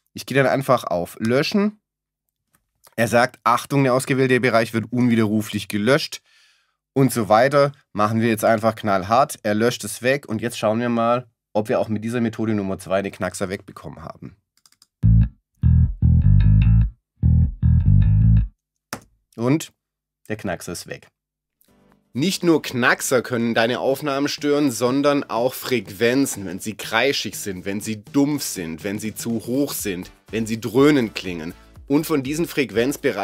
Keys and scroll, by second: 1.2 BackSpace, 18.9 space.